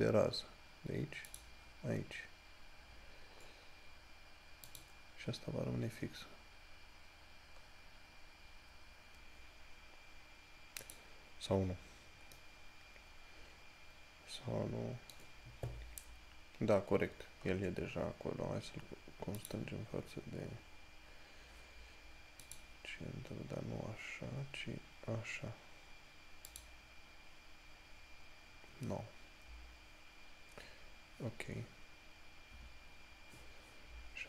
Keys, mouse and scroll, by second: 4.9 click, 11.1 click, 11.8 scroll down 1, 17.9-19.1 scroll up 1, 19.6 click, 20.5 scroll down 1, 22.7 click, 26.7 click.